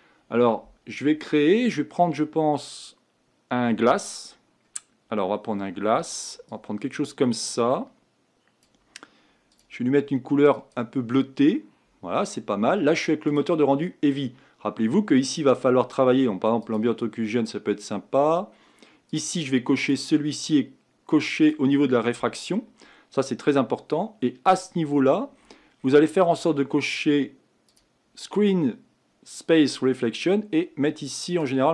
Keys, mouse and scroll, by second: 16.6 click, 19.1 click, 21.5-23.6 drag, 27.7 click, 31.5-31.7 drag.